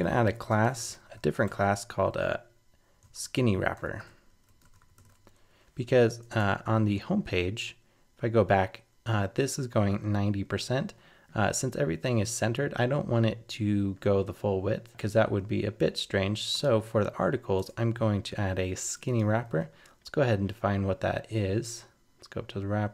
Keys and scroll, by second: 5.9 super+s, 6.2 super+Tab, 19.4 super+c.